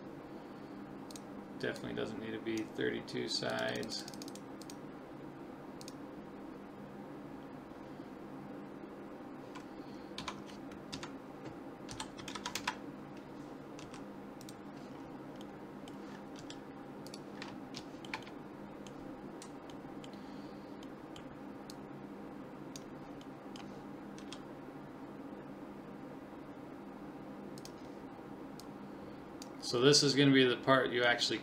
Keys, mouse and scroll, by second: 0.4 middle click, 1.1-7.7 drag, 10.2 Tab, 10.9 KP_3, 11.9 r, 13.8 s, 14.9-17.4 middle drag, 16.4 s, 17.8 middle click, 21.7 click, 22.2 middle click, 23.3-25.2 middle drag, 24.2 s, 28.6 click, 29.8 middle click, 30.1-31.4 middle drag.